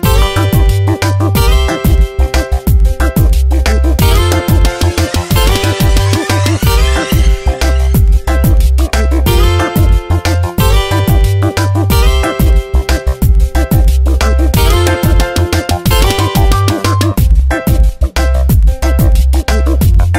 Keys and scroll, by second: 2.9 space, 3.8 v, 5.1 ctrl+z, 6.2 s, 12.1 space, 13.6 v, 14.8 m, 16.4 space.